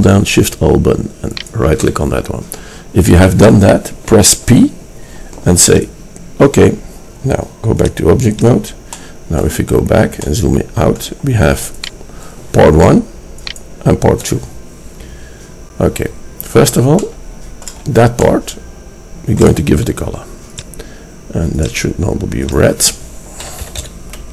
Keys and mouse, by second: 1.4-3.5 drag, 4.5 p, 11.9 right click, 15.2-18.4 middle drag, 21.9-24.3 drag.